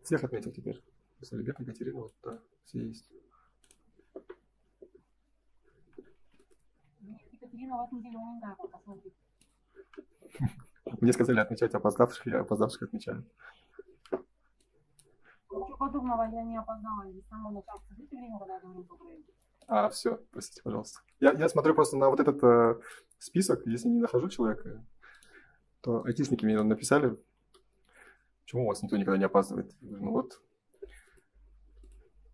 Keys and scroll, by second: 6.6 Escape, 8.0 ctrl+s, 27.3 ctrl+s.